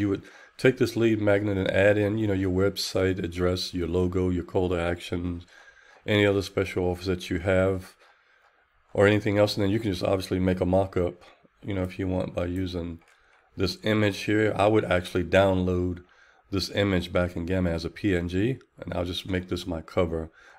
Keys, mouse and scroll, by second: 11.1 click.